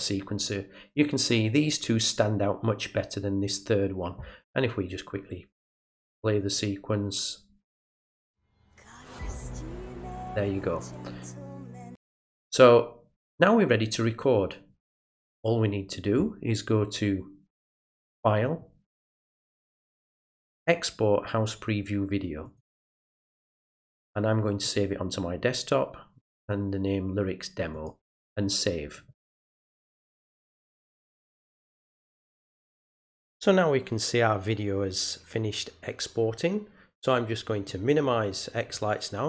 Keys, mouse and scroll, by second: 7.7 click, 11.8 click, 18.0 click, 22.4 click, 24.6 click, 27.7 click, 37.5 click.